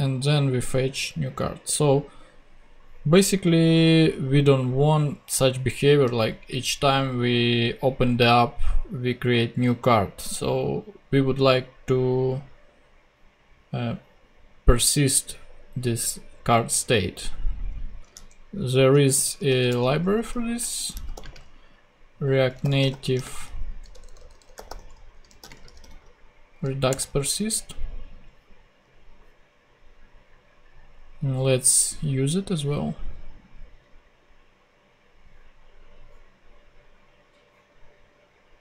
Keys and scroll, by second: 18.1 super+Tab, 19.5 super+t, 20.3 super+r, 20.4-26.3 typing, 26.9 Return.